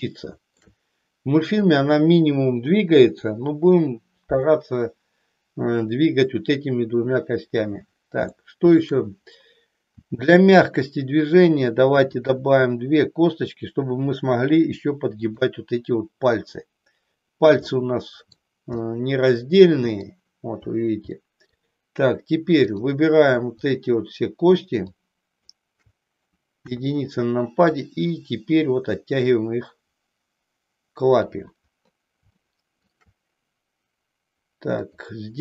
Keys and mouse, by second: 0.0 shift+middle click, 8.4 shift+middle click, 9.9 e, 12.5 e, 17.6 middle click, 18.9-20.1 middle drag, 21.2 middle click, 22.6 click, 23.8 shift+click, 25.0 shift+click, 26.5 KP_1, 27.6-31.1 drag, 32.4 shift+middle click, 34.9 click.